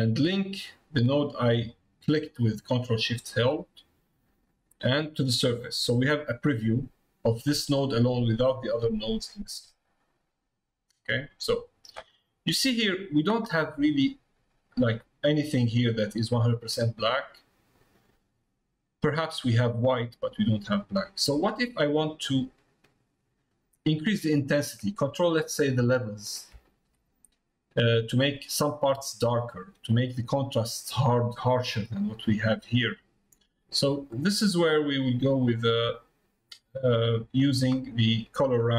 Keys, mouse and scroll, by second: 10.0 middle click, 13.6 middle click, 18.2 middle click, 22.3 click, 23.2 middle click, 25.0 middle click, 25.9 shift+middle click, 26.7 shift+middle click, 34.1-35.1 drag, 35.4 middle click, 36.9 middle click.